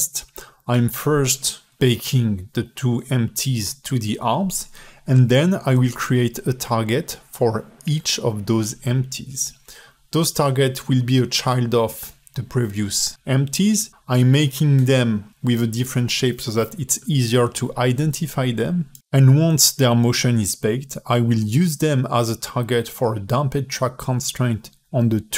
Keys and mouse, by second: 0.0 click, 0.4 F2, 0.7 BackSpace, 0.9 BackSpace, 1.5 drag, 1.9 click, 2.3 click, 3.0 shift+click, 3.1 q, 4.5 alt+middle click, 4.6 click, 4.8 alt+middle click, 4.9 click, 5.0 alt+middle click, 5.3 shift+d, 5.8 alt+middle click, 7.4 a, 7.5 x, 7.8 middle click, 8.0 click, 8.1 alt+middle click, 8.4 shift+d, 8.8 alt+shift+middle click, 9.0 alt+middle click, 9.2 drag, 10.5 alt+middle click, 10.9 a, 11.0 x, 11.4 click, 11.6 click, 12.2 click, 12.7 click, 13.6 click, 14.0 click, 14.5 shift+click, 14.6 q, 16.0 click, 16.8 shift+click, 17.2 ctrl+z, 17.5 ctrl+z, 17.8 click, 17.9 shift+click, 18.4 click, 18.7 a, 18.8 x, 19.4 click, 19.6 ctrl+z, 19.8 ctrl+z, 20.0 ctrl+z, 20.2 ctrl+z, 20.3 space, 20.6 space, 20.6 click, 21.5 q, 23.0 alt+shift+click, 23.4 click, 23.6-24.2 drag, 24.4 click, 24.8 click, 25.0 g.